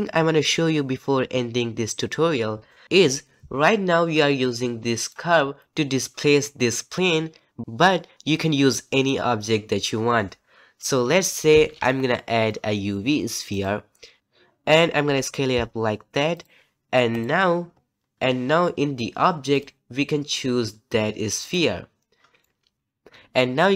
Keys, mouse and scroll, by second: 13.6 shift+a, 14.2 ctrl+z, 15.0 s, 17.2 click, 21.5 click, 22.4-23.7 middle drag.